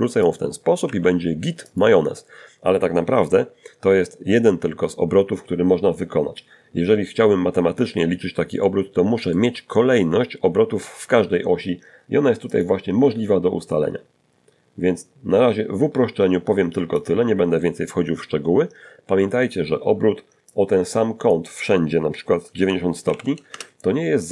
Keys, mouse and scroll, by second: 2.5-3.1 scroll up 2, 6.3 scroll down 1, 6.8 shift+middle click, 10.7 click, 15.2 click, 18.7 click, 21.3 9, 21.7 Return, 21.7 0, 23.9 click.